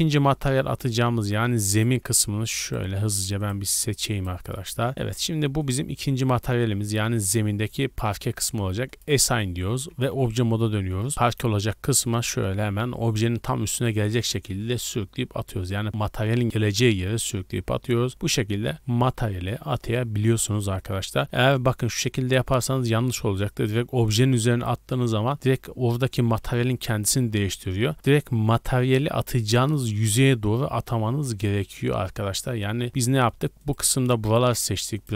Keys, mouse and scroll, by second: 0.4 scroll up 2, 0.7-1.0 middle drag, 1.1-1.4 scroll down 2, 1.4-1.7 shift+middle drag, 1.7 right click, 2.7 shift+right click, 3.1 shift+middle drag, 3.4-4.2 shift+right drag, 4.5-5.4 middle drag, 5.6 click, 8.9 click, 10.1 Tab, 12.1 click, 15.9-16.4 middle drag, 16.4-17.3 scroll up 6, 16.7 shift+middle click, 17.7 shift+middle drag, 18.1 shift+middle drag, 18.6-19.5 middle drag, 19.7-20.1 scroll down 3, 20.3-20.7 shift+middle drag, 20.9 scroll up 1, 21.2 scroll down 1, 21.5 shift+middle click, 22.2 scroll down 2, 22.7-23.4 shift+middle drag, 23.4 click, 27.3 ctrl+z, 27.9 middle click, 28.0 scroll up 1, 28.5 shift+middle drag, 29.8 click, 33.0 Tab, 33.6 right click, 34.2 shift+right click, 34.9 shift+right click.